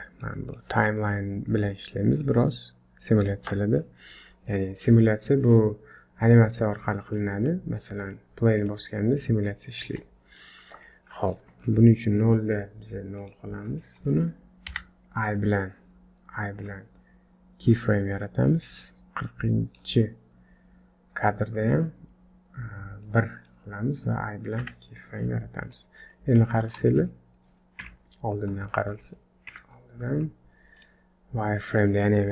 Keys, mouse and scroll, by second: 0.2 click, 5.2 scroll down 4, 5.5 middle click, 7.2 middle click, 8.6 click, 9.8 Escape, 11.1-11.4 scroll up 2, 11.4 shift+middle click, 13.2 click, 14.7 i, 18.7 click, 23.0 click, 24.6 i, 26.1 middle click, 27.0 shift+middle click, 27.1-27.6 scroll up 2, 27.6 scroll up 1, 27.8 KP_1, 28.5 middle click, 29.5 KP_1, 30.1 z, 31.2 scroll down 1.